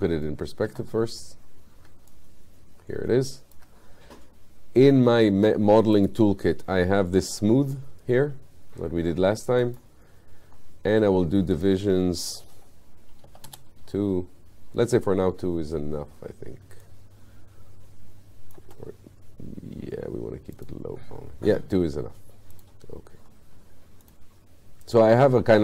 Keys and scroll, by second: 13.3 2.